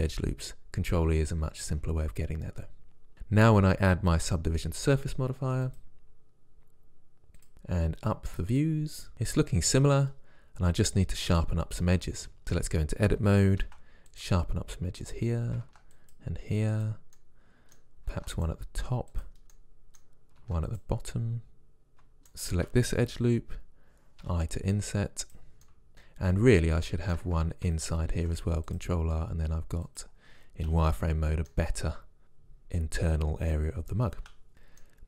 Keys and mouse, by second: 4.3 Tab, 5.7-7.3 drag, 8.3 click, 9.1-10.3 middle drag, 12.5 Tab, 13.6 ctrl+r, 15.6 ctrl+r, 17.2-22.1 drag, 18.1 ctrl+r, 20.4 ctrl+r, 24.2 i, 28.1 ctrl+r, 30.7 z, 32.2 middle click, 34.2 z, 34.5 click.